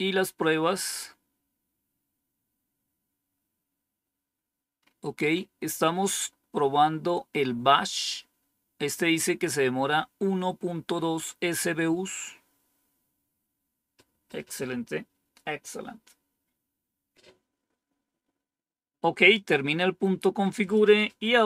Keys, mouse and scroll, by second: 0.4 scroll down 2, 1.1-1.9 scroll down 2, 1.9-2.6 scroll down 1, 2.6 scroll down 1, 3.7 scroll down 2, 4.7-6.6 scroll up 4, 6.6 scroll up 1, 8.0-8.6 scroll up 2, 8.6 scroll up 1, 13.2 scroll down 2, 20.5 click, 21.2 Up.